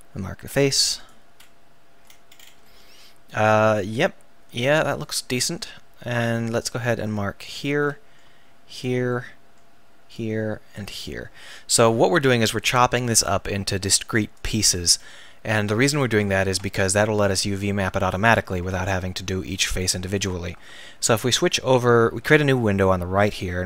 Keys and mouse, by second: 1.5 click, 1.9 click, 1.9 middle click, 7.5 middle click, 8.1-12.2 drag, 12.2-14.4 middle drag, 14.4-16.8 drag, 17.3 middle click, 17.6 click, 17.8 right click, 17.9-19.9 drag.